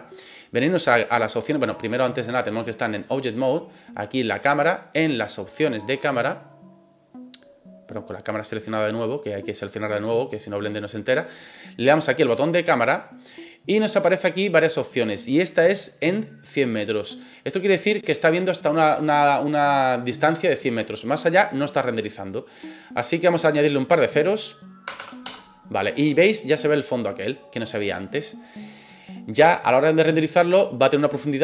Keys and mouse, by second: 2.6 click, 12.7 click, 23.2-25.8 drag, 25.0 KP_0.